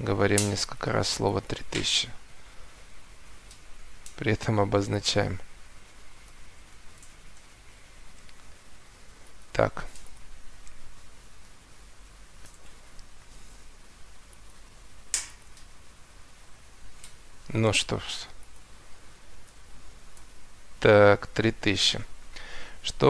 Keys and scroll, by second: 2.6 3, 5.9 3, 6.9 Return, 11.3 3, 12.5 Return, 16.5 3, 19.2 3, 20.1 Return, 21.2 Escape.